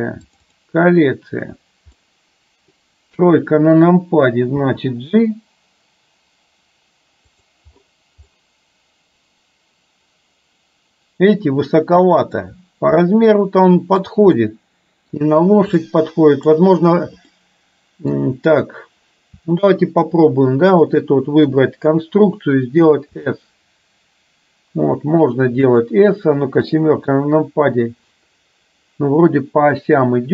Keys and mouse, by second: 2.0-2.9 middle drag, 3.1 KP_3, 4.8 g, 8.4-12.5 middle drag, 13.1-14.1 middle drag, 14.5 middle click, 15.9-16.6 middle drag, 17.4-18.3 middle drag, 23.3 s, 26.6 KP_7, 29.9-30.3 middle drag.